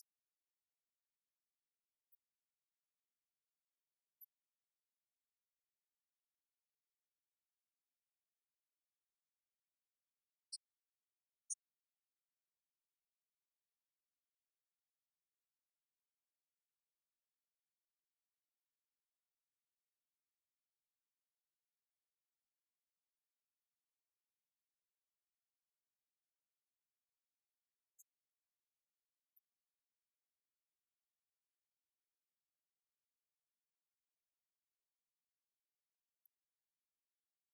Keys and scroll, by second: 34.4 ctrl+Down.